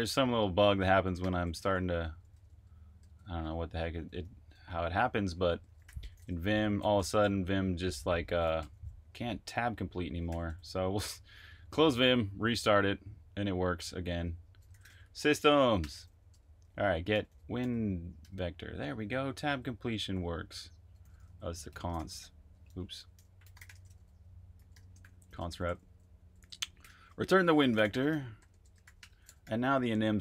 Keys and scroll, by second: 0.9-4.4 typing, 6.0-6.9 typing, 8.3-9.1 typing, 10.2-10.9 typing, 14.5-18.8 typing, 19.9-30.2 typing.